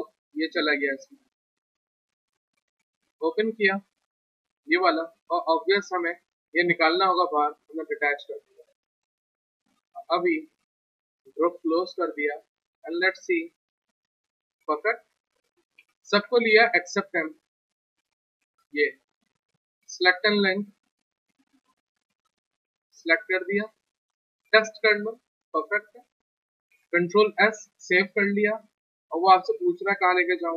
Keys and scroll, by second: 0.1 ctrl+z, 15.1 ctrl+z, 15.8 ctrl+a, 18.8 ctrl+z, 23.0 w, 25.9 ctrl+z, 26.7 ctrl+s, 29.9 alt+Tab.